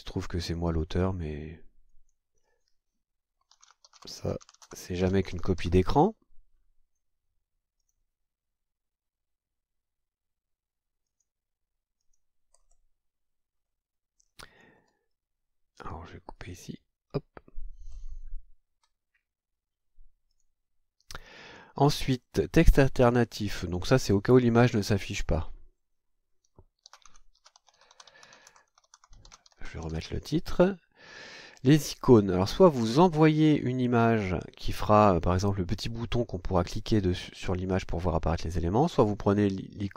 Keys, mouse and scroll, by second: 1.9 click, 3.3-6.2 typing, 7.8 click, 11.0 click, 12.0 click, 12.5-12.9 scroll down 1, 13.5-13.8 scroll down 2, 14.2-14.9 scroll up 3, 14.9-15.6 scroll down 2, 16.3 click, 17.9-18.2 scroll down 2, 18.7-19.0 scroll up 2, 20.3 click, 25.1 click, 26.6-30.4 typing, 31.8 click, 32.4-32.7 scroll down 2, 33.4 click.